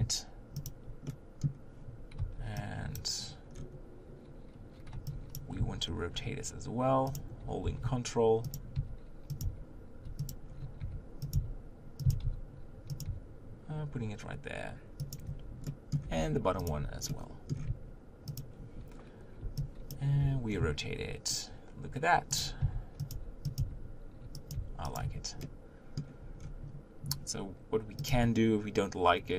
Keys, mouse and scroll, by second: 0.6 shift+click, 1.1-3.0 middle drag, 3.0 b, 5.6 r, 7.6 r, 8.8 s, 9.4 g, 11.3 s, 12.0 s, 13.0 g, 15.3 Tab, 15.7 middle click, 16.0 Tab, 16.7 click, 17.1-18.4 middle drag, 18.4 shift+click, 19.9 b, 20.2 r, 22.6 s, 23.1 g, 23.6 s, 24.5 g, 25.1 Tab, 25.4-26.4 middle drag, 26.4-27.1 scroll down 1, 27.9 scroll down 2, 28.2 click.